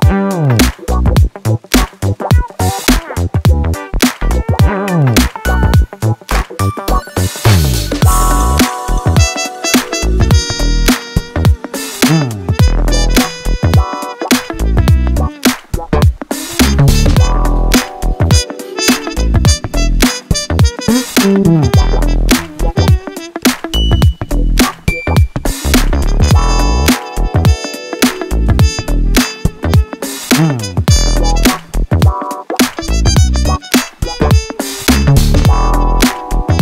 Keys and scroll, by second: 0.8 9, 0.8 Return, 1.2 0, 1.3 Return, 4.2 shift+f, 5.4 3, 10.0-11.9 typing, 12.0 Escape, 14.4 4, 24.8 F1, 25.0 F2, 27.5 ctrl+z, 28.1 9, 28.2 Return, 29.0 1, 30.0 ..